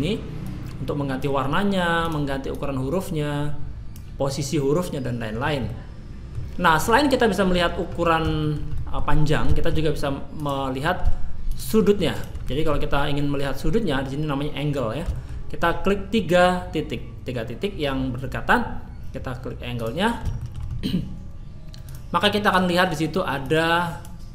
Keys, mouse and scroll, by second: 2.0 click, 2.5 click, 5.3-5.8 scroll down 2, 5.7 middle click, 7.7-8.2 scroll up 2, 8.4 shift+middle click, 8.7 middle click, 9.5 shift+middle click, 10.4 click, 10.7 scroll down 1, 11.5 shift+click, 12.1 shift+click, 12.4 middle click, 15.1 shift+middle click, 19.7 click, 20.3 shift+middle click, 21.9 click, 22.4 click.